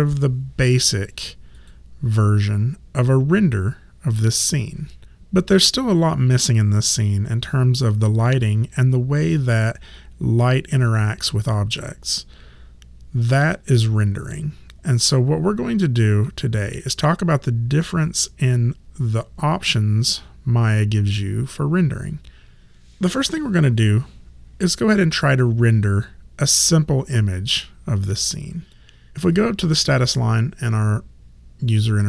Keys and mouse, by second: 1.5 click.